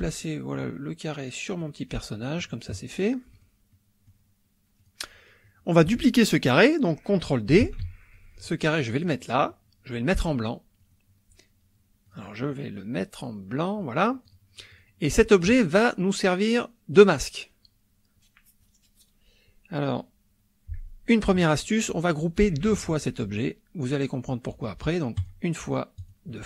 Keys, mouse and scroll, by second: 0.5-1.8 drag, 3.3 click, 3.7 middle click, 4.2 click, 4.8 click, 7.6 ctrl+d, 8.1-9.2 ctrl+drag, 10.8 click, 12.1 click, 13.5 click, 14.3 click, 14.7 click, 25.2 click, 25.9 click.